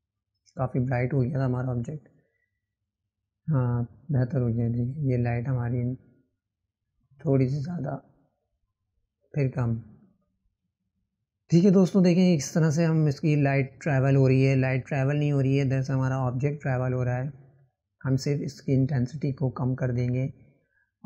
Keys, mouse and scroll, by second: 3.9-5.3 drag, 9.0-10.3 drag, 12.4 click, 15.5-18.5 drag.